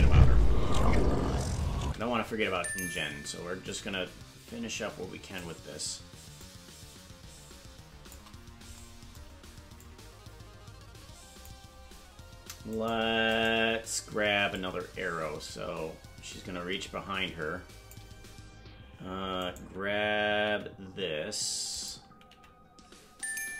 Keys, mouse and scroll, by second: 1.9 space, 2.9-5.4 drag, 6.4-8.1 shift+drag, 9.8-11.5 drag, 12.8 right click, 13.4 right click, 14.5-18.0 drag, 19.4 right click, 20.4 g, 21.7 right click, 22.3 g.